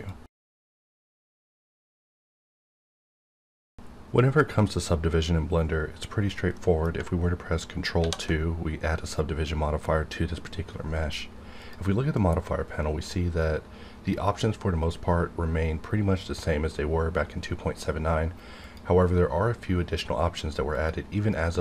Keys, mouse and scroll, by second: 7.0 ctrl+Num_Lock, 8.0 ctrl+2, 11.6 click, 18.6 click, 18.7 click.